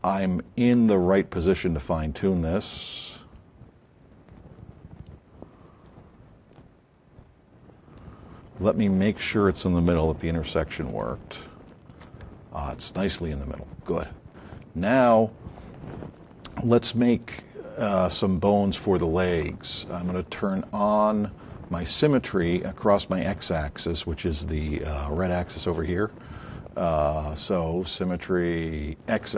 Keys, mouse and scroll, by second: 2.7 click, 5.1 click, 6.5 click, 10.0 alt+click, 11.0 shift+click, 12.0 shift+click, 27.9 click, 29.0 click.